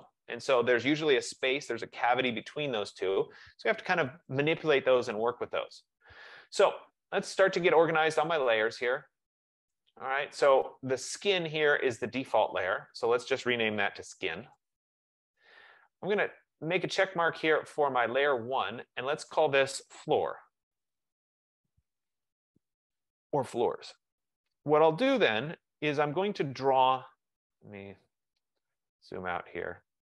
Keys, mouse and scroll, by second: 6.9 click, 8.3 click, 9.9 click, 12.2 click, 12.9 click, 13.8-15.7 typing, 16.9 click, 18.2 F15, 19.0 click, 20.0-21.3 typing, 25.6 click, 26.1 click, 28.1 click, 29.1-30.0 scroll.